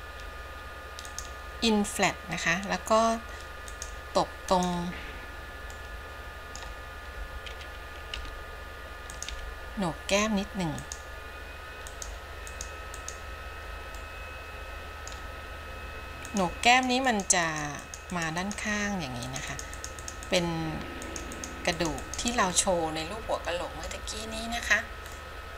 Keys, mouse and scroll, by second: 1.2 click, 4.1 click, 4.9 click, 5.9 middle click, 8.3 f, 12.1 click, 12.7 click, 13.2 click, 14.1-15.3 middle drag, 16.5 click, 16.9 click, 17.3 click, 17.7 click, 18.1 click, 18.4 click, 18.7 click, 19.4 click, 19.7 click, 20.0 click, 20.3 click, 20.5 click, 21.3 click, 21.6 click, 22.1 click, 22.3 click, 22.8-24.1 middle drag, 24.7-25.4 scroll down 1, 25.4 middle click.